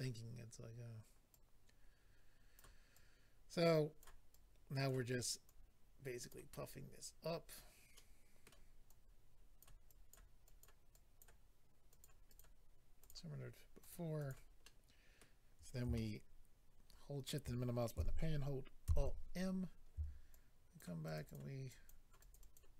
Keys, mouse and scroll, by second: 1.3 click, 2.9 click, 4.3 click, 5.4 click, 6.5-7.0 scroll down 2, 7.0 click, 7.9 middle click, 8.8 click, 9.8 click, 10.4 click, 10.6 click, 10.9 click, 11.9 click, 12.0 click, 12.2 click, 12.3 double click, 13.0 double click, 13.1 double click, 13.8 double click, 13.9 click, 14.2 click, 14.3 click, 14.6 middle click, 15.9 shift+middle click, 18.8 alt+m, 19.5-20.1 scroll up 2, 20.3 shift+click, 21.0 shift+click, 21.1 shift+click, 21.2 shift+click, 21.3 shift+double click, 21.7 shift+click, 22.2 shift+click, 22.3 shift+click, 22.4 shift+click, 22.5 shift+double click.